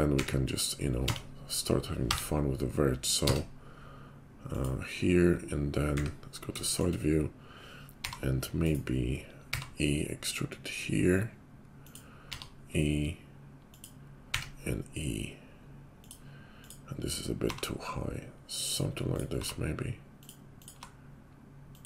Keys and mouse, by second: 0.1 e, 5.9 `, 7.9 g, 9.4 e, 12.2 e, 14.3 e, 16.5 click, 16.6-21.8 middle drag, 17.4 g, 19.3 g, 20.8 g.